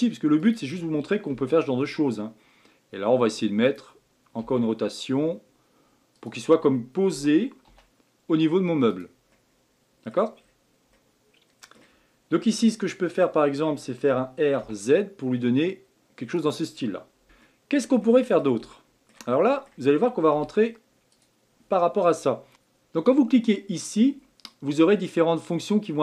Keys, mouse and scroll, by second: 4.4 r, 9.3-10.4 middle drag, 10.4 scroll down 2, 10.9-14.1 middle drag, 14.1 r, 17.2-20.3 shift+middle drag, 20.3 z, 22.5 ctrl+z.